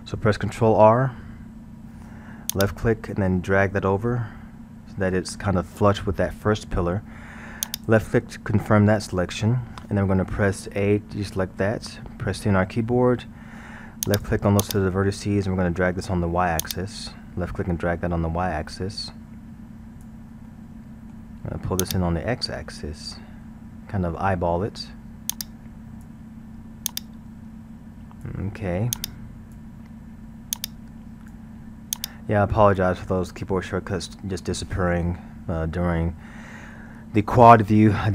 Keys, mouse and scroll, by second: 1.0 ctrl+r, 11.0 a, 12.5 c, 15.5-16.7 middle drag, 16.7-19.7 drag, 20.5-21.8 middle drag, 21.8-23.9 drag, 23.9-25.3 middle drag, 25.3-35.0 drag.